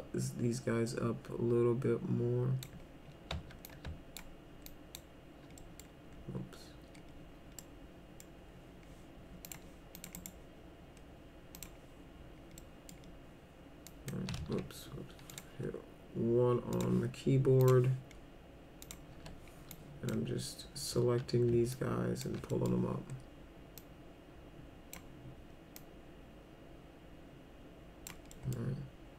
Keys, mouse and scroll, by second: 3.6 alt+click, 4.7 alt+click, 5.6 middle click, 7.6 middle click, 9.5 click, 10.0 click, 10.2 right click, 11.6 click, 12.6 middle click, 13.9 click, 14.4 ctrl+z, 15.3 click, 15.6 1, 16.7 click, 17.6 click, 18.8 click, 19.1 1, 19.7 click, 21.7 ctrl+click, 22.5 middle click, 23.8-24.9 drag, 25.8-28.1 drag, 28.3 middle click.